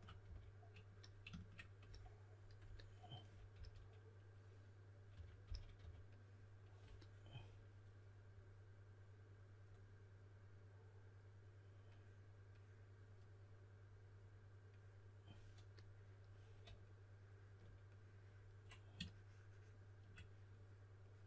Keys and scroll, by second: 0.2 d, 3.5 s, 4.8-6.2 typing.